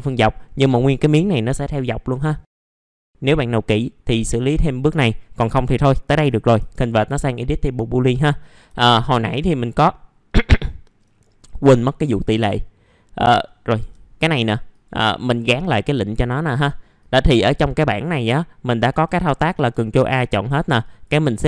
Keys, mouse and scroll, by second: 0.0-0.4 scroll down 1, 0.4 middle click, 2.6 middle click, 2.7 alt+middle click, 2.9-5.9 scroll up 1, 7.9 scroll down 1, 8.4 middle click, 8.7 alt+middle click, 9.3 F4, 11.0 right click, 12.0 click, 13.7 F4, 14.7 click, 18.6 middle click, 19.2 scroll down 1, 20.1 click.